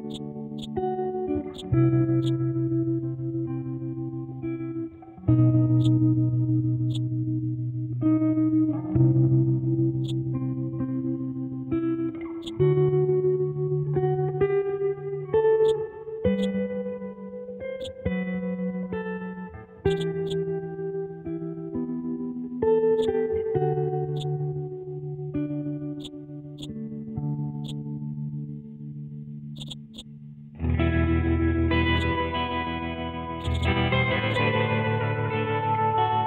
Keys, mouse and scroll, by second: 6.9-9.8 drag, 10.0-11.5 drag, 11.5-11.8 scroll down 1, 12.4-13.8 drag, 13.8-14.1 scroll up 1, 14.1 scroll down 1, 15.3 alt+Num_Lock, 15.3 scroll down 1, 15.6 alt+click, 16.9 scroll up 1, 17.2 scroll down 1, 17.8-19.5 drag, 19.8-22.1 drag, 22.1-23.0 scroll down 1, 23.0-25.3 drag, 25.3 scroll up 1, 26.0-29.2 drag, 29.5-36.2 drag.